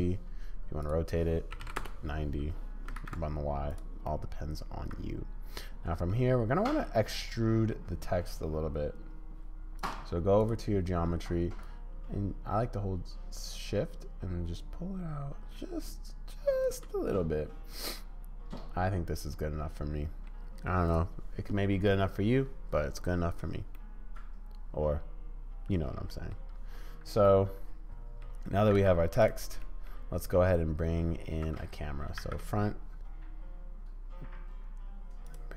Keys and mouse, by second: 0.2 middle click, 2.5-2.9 middle drag, 2.9 ctrl+z, 4.1-5.9 middle drag, 6.9-7.7 middle drag, 9.8 click, 10.4 click, 11.6-16.8 drag, 18.0-20.3 middle drag, 23.7-26.3 middle drag, 27.2-28.2 middle drag, 28.6 g, 29.6 middle click, 29.7 click, 32.2 shift+a.